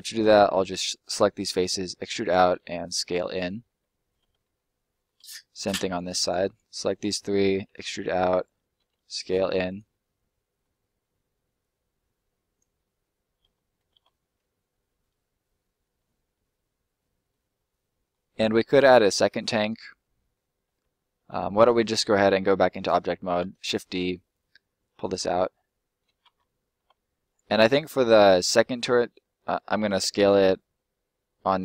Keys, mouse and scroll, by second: 0.0 middle click, 1.5 e, 2.2 click, 2.5 s, 3.3 click, 3.6 middle click, 4.5 middle click, 5.4 middle click, 5.8 right click, 6.0 shift+right click, 7.1 middle click, 7.6 e, 8.3 click, 8.8 s, 9.6 click, 9.9 middle click, 11.5 click, 13.2 middle click, 13.6-14.3 scroll down 2, 14.3 middle click, 15.9-16.3 scroll up 1, 16.3 middle click, 19.5 scroll down 1, 19.7 middle click, 21.4 middle click, 23.0 shift+middle click, 23.3 shift+d, 23.9 middle click, 25.0 click, 25.4 middle click, 27.2 right click, 30.0 s.